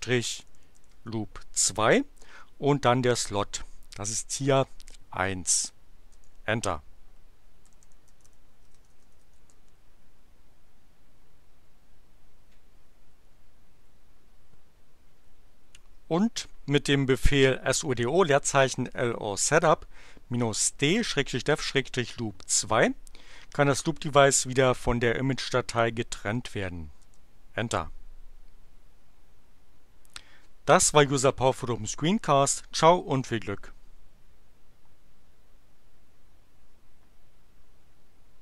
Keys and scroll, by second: 0.0-1.4 typing, 3.1 space, 5.1 1, 6.0 Return, 7.4-9.6 typing, 13.0 Up, 26.9 Return.